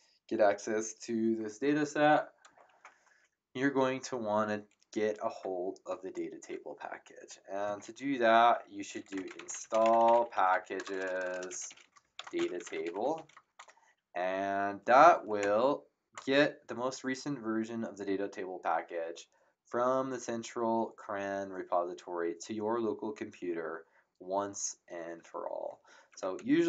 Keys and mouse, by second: 8.8-13.6 typing, 15.4 ctrl+Return, 26.3 Up.